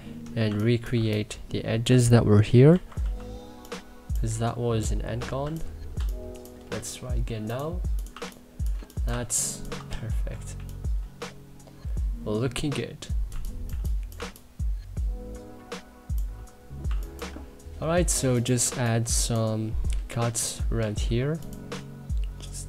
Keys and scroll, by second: 0.1 2, 2.3 x, 2.6 b, 5.6 3, 9.6 e, 10.2 3.